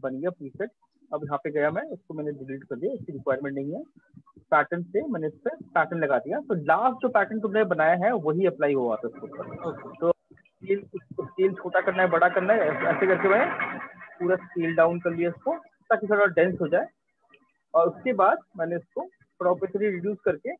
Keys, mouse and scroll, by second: 1.8 Delete, 3.6 click, 5.0 click, 8.3 click, 11.2 click, 14.6 click, 16.0 click, 16.4 click, 19.4 click.